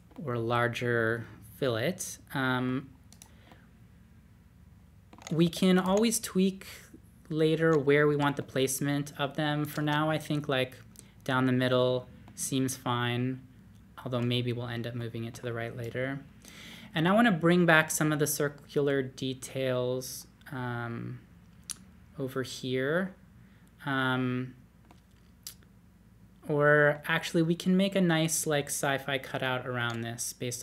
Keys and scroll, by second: 5.2-6.3 typing, 8.1 Escape, 9.8 space.